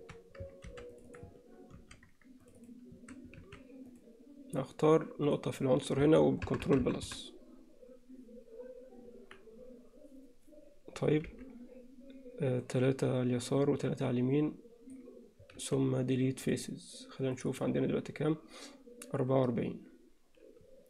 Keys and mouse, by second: 0.7 ctrl+r, 1.8 ctrl+r, 3.0 a, 3.9 click, 6.7 ctrl+KP_Add, 7.1 ctrl+KP_Add, 11.3 b, 15.6 x, 17.5 click.